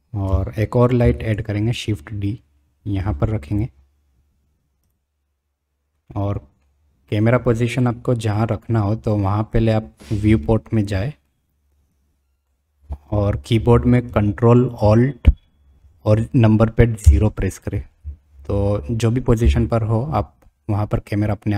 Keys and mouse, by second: 1.0 shift+d, 6.1-6.6 middle drag, 7.8-8.7 middle drag, 10.4-10.8 shift+middle drag, 11.3 click, 12.5 middle click, 13.0 click, 17.0 ctrl+alt+KP_0.